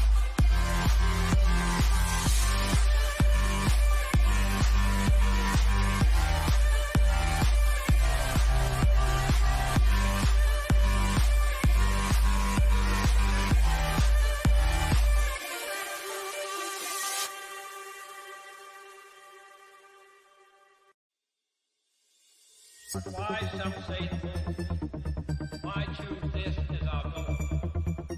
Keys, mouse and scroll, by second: 6.0 click, 14.4 click, 17.1 click, 18.9 scroll up 1, 24.8 click.